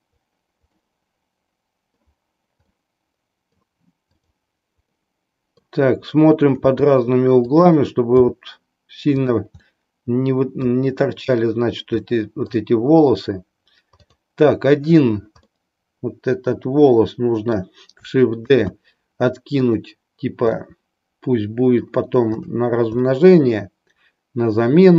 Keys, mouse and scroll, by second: 0.8-2.0 middle drag, 2.8-3.7 middle drag, 4.1 drag, 4.9-5.8 middle drag, 6.7 r, 8.2 g, 9.6-10.8 middle drag, 12.0 middle click, 15.5-17.8 middle drag, 18.7 shift+d, 20.6-21.9 middle drag, 22.4 click, 23.2-24.9 middle drag.